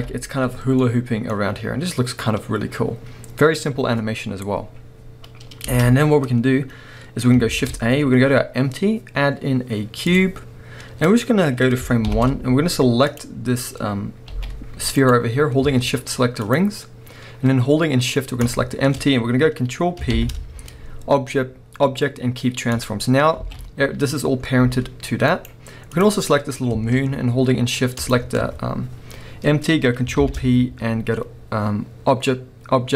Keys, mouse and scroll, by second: 0.0 KP_1, 5.6 space, 7.5 shift+a, 10.8-12.1 scroll down 1, 12.1 shift+Left, 13.1 click, 20.1 ctrl+p, 23.4 alt+a, 24.1 drag, 24.3-24.6 scroll down 1, 24.6 g, 25.5 right click, 25.9 click, 26.2-28.0 scroll up 1, 28.0 shift+click, 30.2 ctrl+p.